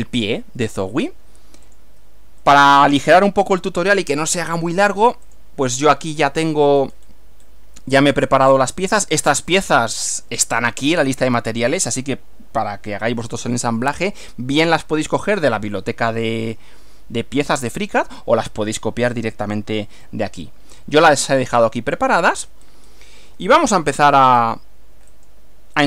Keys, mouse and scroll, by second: 1.7 click, 2.5 right click, 5.3 click, 6.9-7.3 scroll down 1, 7.4 scroll up 1, 9.1 scroll down 1, 9.6-10.2 shift+middle drag, 10.5 shift+middle click, 20.1-21.2 shift+middle drag, 21.6-22.6 shift+middle drag, 22.7-23.1 shift+scroll up 1, 23.5-24.3 shift+middle drag, 25.1 click.